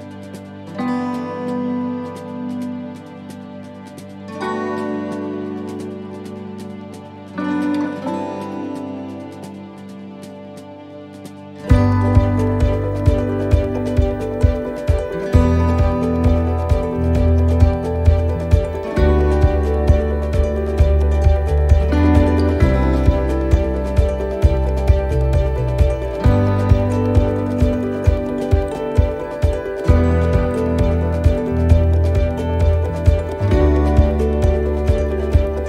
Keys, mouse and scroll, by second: 4.3 e, 6.3 click, 9.5 right click, 11.2 ctrl+z, 11.6 middle click, 12.5 middle click, 14.4 right click, 15.4 alt+shift+right click, 16.6 e, 21.5 click, 23.7 ctrl+r, 25.0 s, 30.7 middle click, 31.8 shift+middle click, 32.2-32.8 scroll up 3, 32.6 middle click, 33.7 right click, 35.1 l.